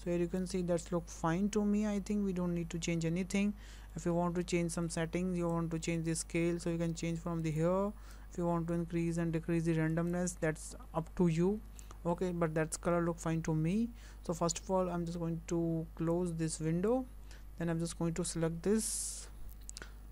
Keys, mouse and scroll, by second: 3.6 scroll down 4, 3.9 shift+middle click, 4.6 shift+middle click, 5.5 click, 8.2 click, 11.6 scroll down 3, 11.8 shift+middle click, 16.1 click.